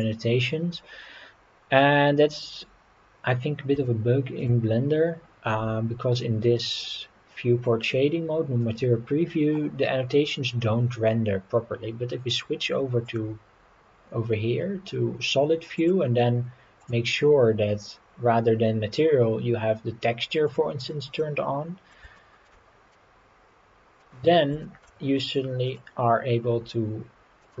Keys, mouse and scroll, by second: 3.9 shift+middle click, 13.1 click, 15.8-20.8 drag, 21.2 middle click, 22.2 shift+middle click, 22.9-24.0 middle drag, 24.6 shift+middle click, 25.6-27.6 drag.